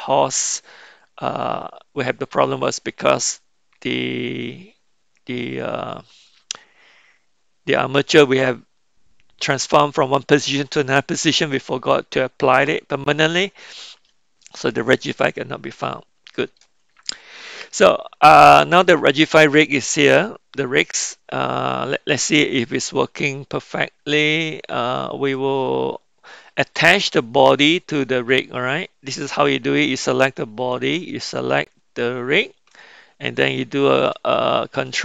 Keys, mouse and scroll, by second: 11.5-12.6 middle drag, 13.0 middle click, 15.9-16.6 middle drag, 26.9 click, 30.8 shift+click.